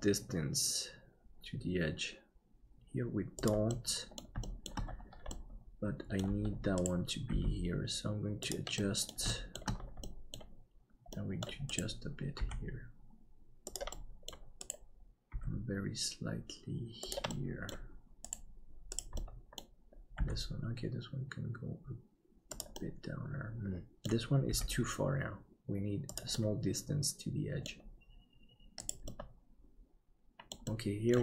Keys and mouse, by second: 3.8 middle click, 4.5 shift+middle click, 5.5 middle click, 8.8 middle click, 9.5 shift+middle click, 10.0 middle click, 11.3 middle click, 12.4 g, 14.0 middle click, 15.3 g, 17.3 middle click, 19.2 middle click, 20.2 g, 22.8-24.0 middle drag, 24.5 g, 26.5-27.7 middle drag, 29.0-30.5 middle drag, 30.7 middle click.